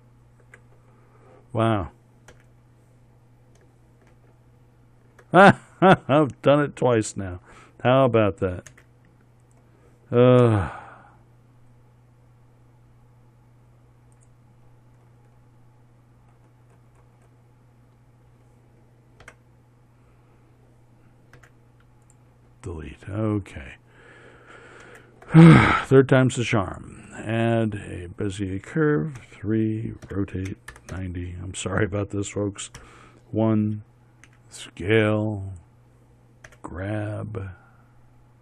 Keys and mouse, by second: 0.2 ctrl+h, 2.8 h, 4.6 shift+h, 9.2 d, 10.9 x, 17.6-19.7 middle drag, 19.7 Tab, 21.9 x, 25.3 shift+a, 29.7 KP_3, 30.6 r, 33.3 KP_1, 34.8 s, 37.0 g.